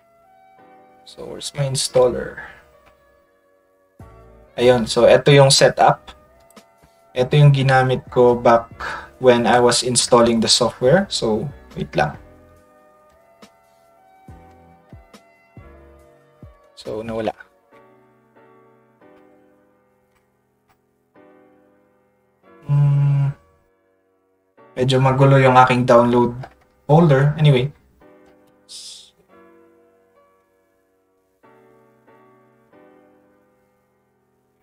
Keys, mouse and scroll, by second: 1.0 middle click, 1.5 middle click, 2.5 middle click, 2.8 middle click, 3.9 middle click, 6.4 click, 14.9 ctrl+scroll up 1, 19.5 middle click, 20.1 middle click, 20.6 middle click, 29.3 middle click, 29.6 middle click, 30.3 middle click, 31.0 middle click, 32.2 ctrl+middle click, 32.6 middle click, 34.5 middle click.